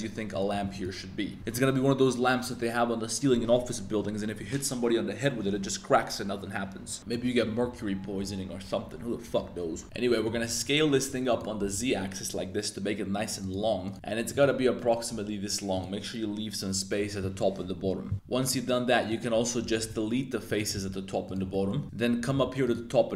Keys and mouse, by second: 0.0-1.2 typing, 0.3 click, 7.0 middle click, 10.1 middle click, 10.3 s, 10.5 z, 11.6 s, 11.8 z, 13.4 click, 13.5 s, 13.8 click, 13.9 s, 14.3 click, 14.8 middle click, 15.1 s, 15.7 click, 18.1 3, 18.4 click, 19.0 click, 19.4 shift+middle click, 19.8 shift+z, 20.7 x, 21.5 shift+click, 21.7 z, 21.8 alt+1, 22.3 shift+s.